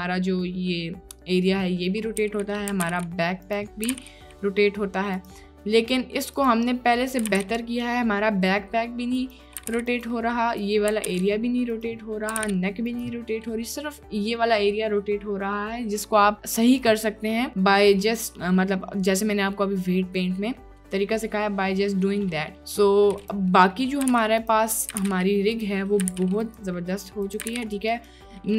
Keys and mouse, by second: 1.8-2.2 drag, 2.3 r, 2.8 r, 2.9 y, 3.7 middle click, 4.0 r, 5.4-5.9 middle drag, 6.4 click, 6.8 middle drag, 6.9 click, 7.0 middle click, 7.3 r, 7.3 y, 9.7 r, 9.8 y, 10.2 click, 11.0 r, 11.1 y, 12.0 click, 12.4 r, 13.2 click, 13.2 y, 13.3 middle drag, 18.5 drag, 20.5 click, 21.0 drag, 22.4 click, 22.7 drag, 23.2 click, 23.6 drag, 24.1 r, 24.1 x, 24.7 click, 25.0 r, 25.1 x, 25.8 click, 26.1 r, 26.2 x, 26.8 click, 27.2 click, 27.5 r, 27.6 x, 28.4-28.5 drag.